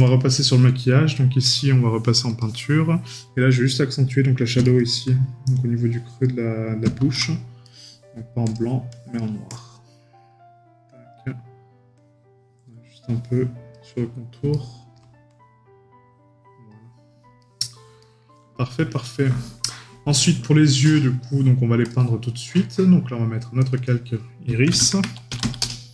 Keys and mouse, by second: 4.6 right click, 7.6 right click, 14.5 right click, 17.4 right click.